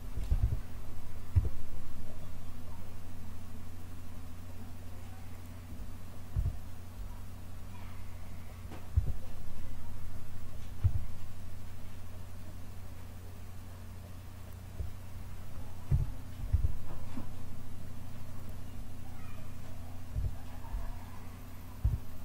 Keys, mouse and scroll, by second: 0.3 e, 6.3 KP_1, 8.9 e, 15.8 KP_7, 16.4 s, 20.1 KP_1, 21.7 e.